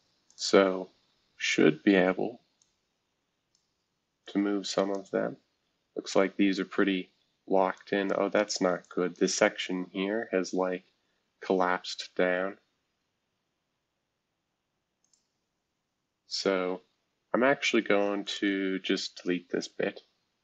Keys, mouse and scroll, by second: 0.3 click, 0.7-1.3 scroll up 2, 1.3-2.6 scroll up 1, 2.6 click, 4.2 click, 6.6-7.7 scroll up 2, 7.7 click, 8.8 click, 9.8-12.6 scroll up 6, 12.6-13.7 scroll down 6, 14.4 scroll down 2, 15.0 click, 18.2 click, 19.5 Delete.